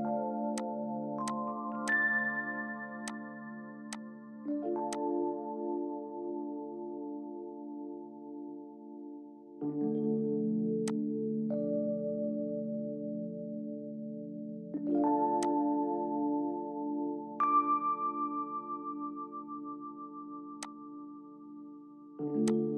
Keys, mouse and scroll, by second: 6.3 middle click, 14.3 right click, 16.7 middle click, 17.8-19.8 scroll down 1.